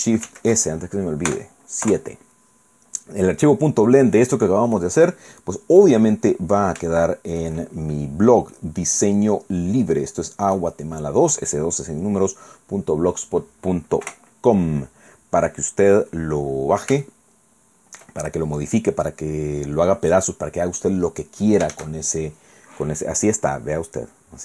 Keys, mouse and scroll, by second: 0.3 ctrl+shift+s, 1.3 KP_Add, 1.9 KP_Enter, 4.1-4.7 scroll down 4, 4.7-6.0 drag, 6.1-6.5 scroll down 2, 7.0 shift+click, 7.7-8.1 shift+scroll up 2, 8.1-8.5 scroll down 1, 8.5-10.7 drag, 10.9 scroll down 1, 11.9-12.7 scroll up 2, 12.9 scroll down 2, 14.1 KP_0, 16.3 scroll down 2, 17.1-18.2 shift+middle drag, 21.7 shift+z.